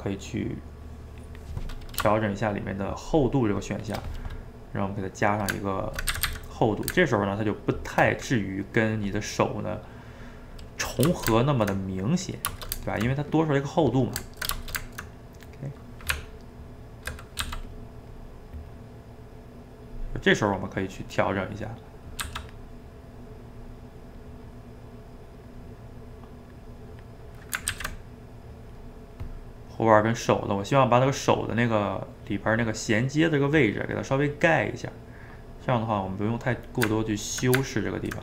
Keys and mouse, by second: 4.3-6.1 middle drag, 6.1 a, 6.3 a, 6.4-10.9 middle drag, 10.9 click, 11.1-16.2 ctrl+shift+middle drag, 16.2 Tab, 17.4 f, 18.1-20.9 drag, 20.9 middle click, 21.6 click, 22.2 f, 22.7 middle click, 23.5 click, 24.5 middle click, 24.9 click, 25.6 middle click, 26.1-27.7 drag, 27.7 ctrl+z, 28.3 click, 28.9 middle click, 29.8-31.2 drag, 31.2-33.6 middle drag, 33.6 click, 34.3 middle click, 34.9 click, 35.5 middle click, 36.2 click, 36.6-38.2 middle drag.